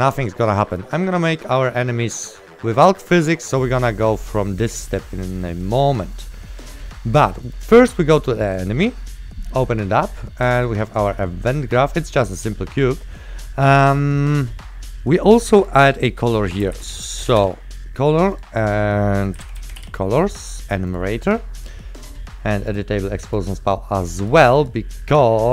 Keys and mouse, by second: 1.3 click, 5.2 right click, 5.2 click, 5.2 right click, 5.7 click, 12.9 right click, 15.7 click, 16.6-17.8 typing, 18.4 click, 20.0 s, 21.0 right click, 23.4 click.